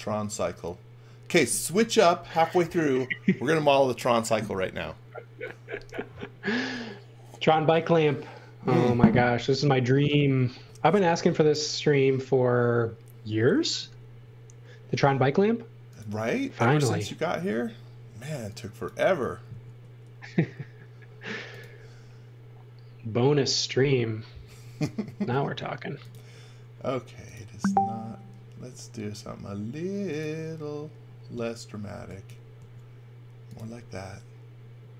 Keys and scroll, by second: 14.9 m, 17.3 space, 18.3 e, 19.5 a, 24.4 space, 25.5 a, 32.0 e, 32.6 a.